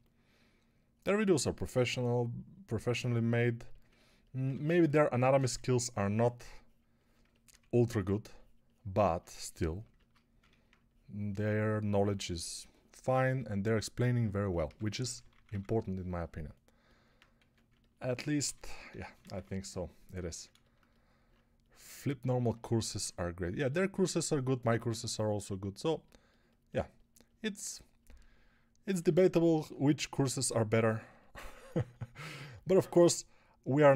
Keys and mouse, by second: 1.2 ctrl+alt+middle click, 1.4 alt+middle click, 4.4 2, 7.5 1, 12.9 alt+shift+middle click, 13.1 alt+middle click, 14.5-15.3 typing, 17.3 a, 18.3-19.2 typing.